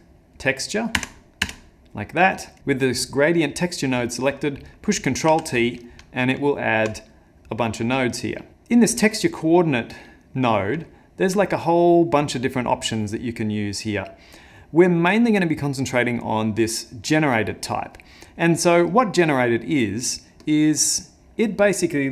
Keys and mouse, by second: 2.6 click, 4.3 click, 5.3 ctrl+t, 6.0 middle click, 6.5 ctrl+middle click, 8.5 click, 10.3 middle click, 10.9 ctrl+middle click, 11.2 middle click, 11.4 middle click, 18.2 middle click.